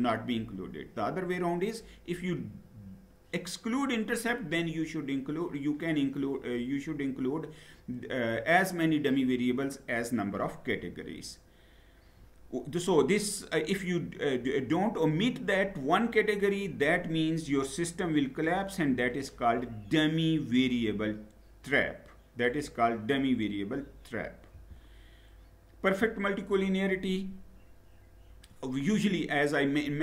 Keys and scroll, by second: 10.6 Down, 24.3 Down.